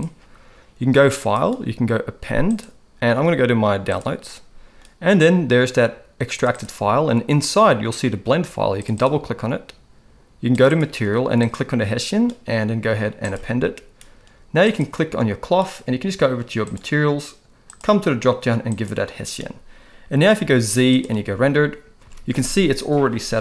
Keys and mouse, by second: 1.3-2.7 drag, 14.6 click, 17.7-18.9 drag, 20.4 z, 22.0 alt+a.